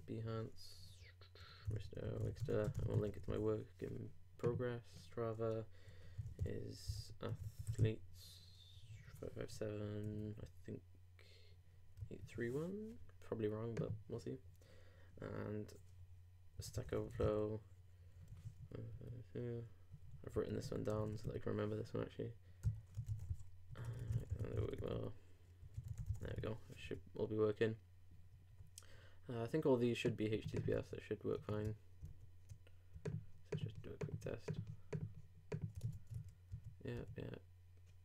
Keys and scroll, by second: 26.8 super+e, 28.5 super+s, 32.1 super+r, 35.9 ctrl+super+Tab, 36.5 ctrl+super+w.